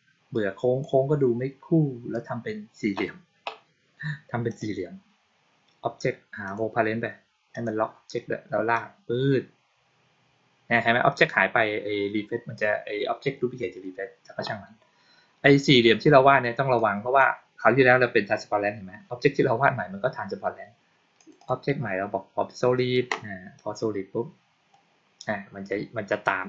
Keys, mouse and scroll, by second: 0.2-0.7 drag, 4.4 click, 6.3 click, 7.4 click, 8.6-11.0 drag, 16.6-17.1 drag, 21.1 click, 21.3 click, 23.4-24.6 drag.